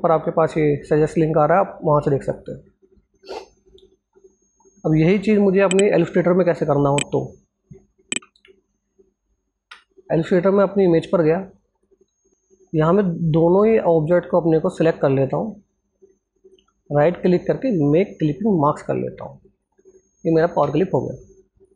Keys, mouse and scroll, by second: 2.1 click, 2.7-4.5 scroll down 1, 5.6 scroll down 1, 5.8 alt+Tab, 7.2 ctrl+alt+scroll down 1, 8.2 ctrl+alt+scroll up 1, 9.4-11.5 alt+drag, 15.9 right click, 18.0 click.